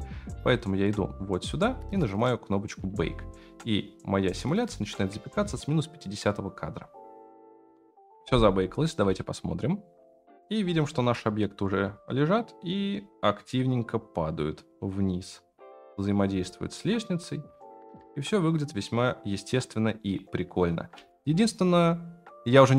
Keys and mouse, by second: 0.4-5.1 drag, 7.7 F9, 9.1 space, 11.2-11.7 shift+middle drag, 20.9 space.